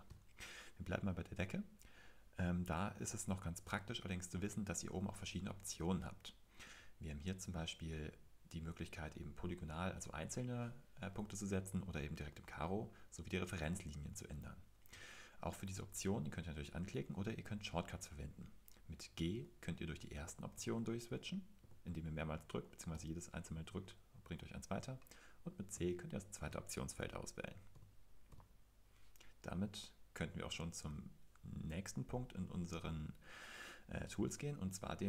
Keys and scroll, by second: 0.0-0.6 typing, 1.7-2.5 typing, 3.5-4.2 typing, 19.3-21.6 typing, 22.9 typing, 25.7-28.3 typing.